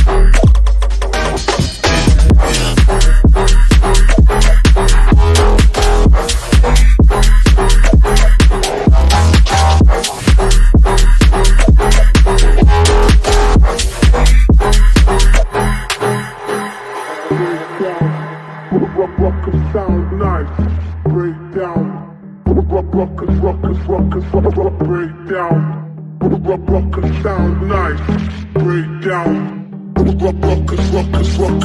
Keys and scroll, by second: 5.7 ctrl+z, 9.4 F3, 20.5 F3, 20.8 Escape.